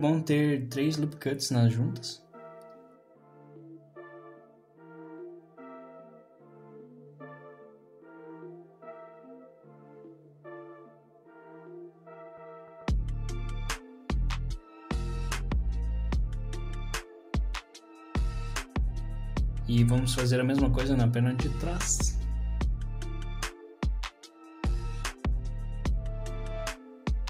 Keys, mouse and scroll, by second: 2.3 s, 3.5 r, 10.6 s, 19.6 shift+middle click, 19.6 scroll up 1, 20.1 ctrl+r, 21.7 click.